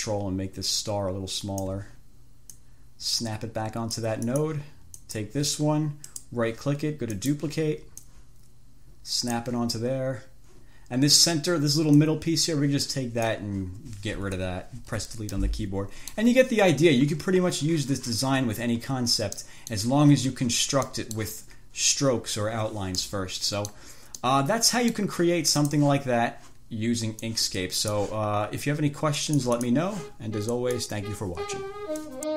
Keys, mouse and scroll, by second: 0.2-2.1 ctrl+drag, 2.9-4.5 drag, 4.6 click, 5.3 click, 6.3 right click, 7.4 click, 8.3-9.9 drag, 12.2-13.7 drag, 14.5 Delete, 15.6-16.6 middle drag, 16.8 scroll up 2, 17.4-17.7 scroll down 2, 19.7 click, 21.1 click, 23.3-24.2 drag, 24.5-25.5 drag, 25.9 click, 27.5-28.5 drag, 29.5-30.2 drag, 30.9 click, 32.3 click.